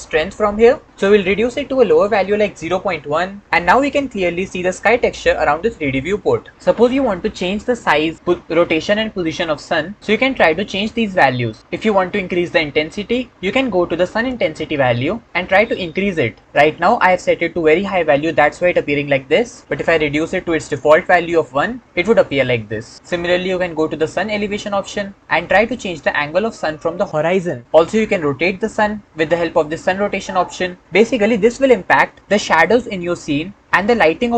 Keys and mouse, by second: 0.8-2.8 drag, 15.2-21.7 drag, 25.2-27.6 drag, 27.6-29.7 middle drag, 29.7-30.8 drag.